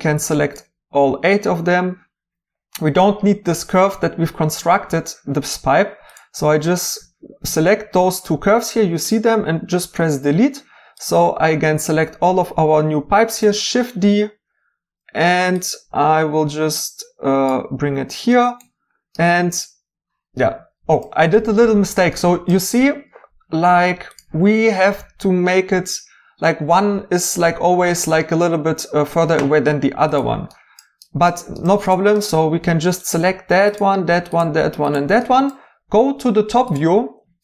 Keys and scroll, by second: 9.7 Delete, 13.4 d.